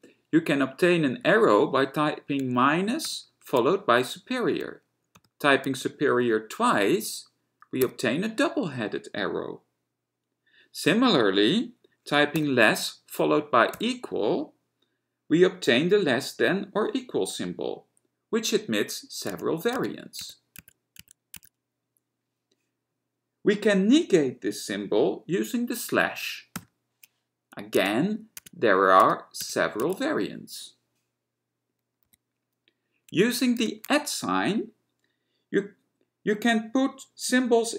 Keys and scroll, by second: 0.0 a, 1.4 -, 3.2 >, 5.5 >, 8.0 b, 12.5 <, 13.9 =, 19.4 Tab, 19.8 Tab, 20.3 Tab, 20.6 Tab, 21.0 Tab, 21.4 Tab, 26.8 /, 27.8 Tab, 28.5 Tab, 29.1 Tab, 29.5 Tab, 29.6 Tab, 29.9 Tab, 32.2 x, 33.8 @.